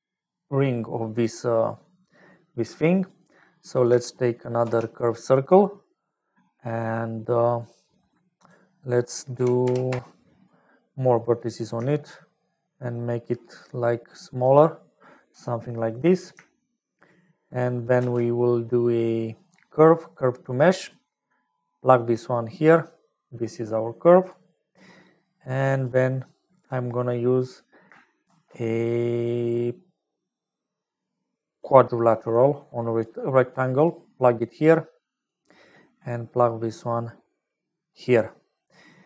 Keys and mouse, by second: 1.6 middle click, 3.7 click, 4.6 shift+d, 5.7 middle click, 6.7 click, 7.5 click, 8.4-10.4 drag, 12.5-14.4 shift+drag, 15.6 click, 17.9 shift+a, 22.7-24.2 drag, 25.2-26.4 drag, 28.2 shift+a, 33.0 click, 34.2-35.2 drag, 35.8 click, 35.8 middle click, 36.7-37.9 drag.